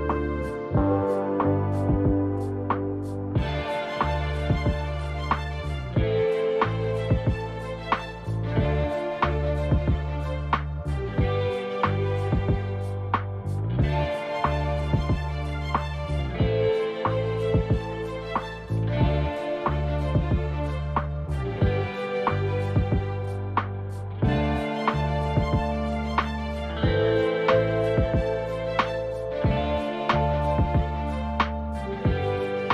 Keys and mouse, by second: 0.5 n, 9.1-10.7 drag, 11.1 click, 12.4-13.4 drag, 14.1-15.4 drag, 17.4 click, 19.3 click, 19.7 click, 20.1 click, 20.4-21.4 drag, 22.4-32.7 drag.